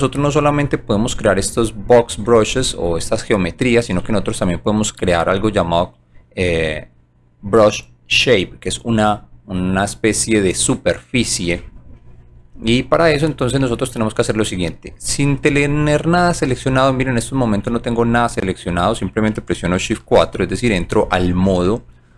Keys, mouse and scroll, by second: 13.9 scroll down 1, 14.8 scroll down 2, 15.2 click, 15.9 scroll down 2, 16.5 right click, 17.2 click, 17.7 scroll up 2, 18.1 right click.